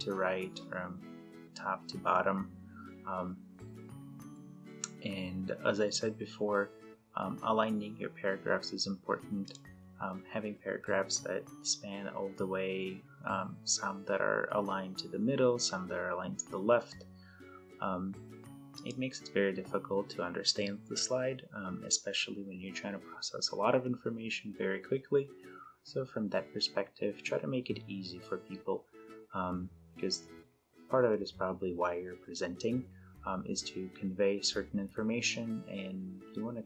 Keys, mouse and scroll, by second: 9.5 click, 18.8 click.